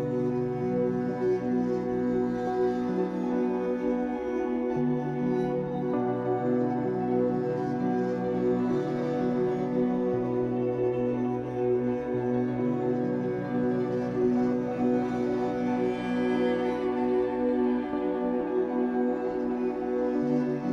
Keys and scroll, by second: 0.9 Escape, 3.6 3, 4.5 w, 8.3 Escape, 16.2 2, 18.6 shift+w.